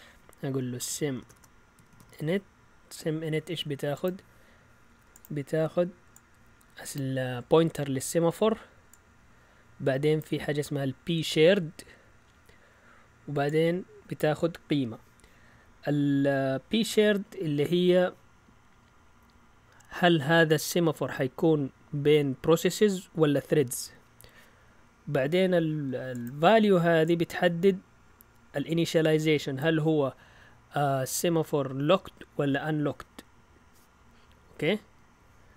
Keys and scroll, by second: 0.3-2.6 typing.